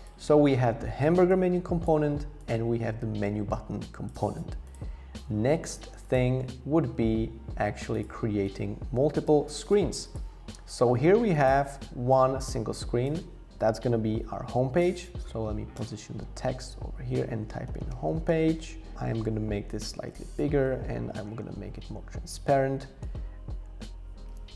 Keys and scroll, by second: 13.8 alt+h, 13.9 alt+v, 15.7 Return, 17.4-18.8 typing, 19.7 Up, 19.8 Up, 19.9 Up, 20.1 Up, 20.6 Left.